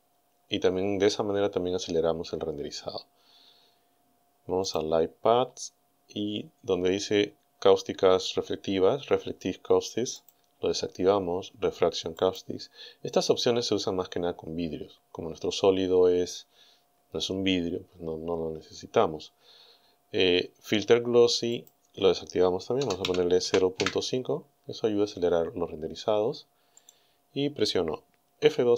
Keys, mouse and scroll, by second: 1.3-2.5 scroll down 4, 3.0 scroll down 2, 4.7 click, 5.3-5.7 scroll down 2, 5.9-6.3 scroll down 2, 10.2 click, 12.2 click, 21.5 click, 22.8 KP_0, 23.1 KP_Decimal, 23.5 KP_5, 23.8 KP_Enter, 26.8 click.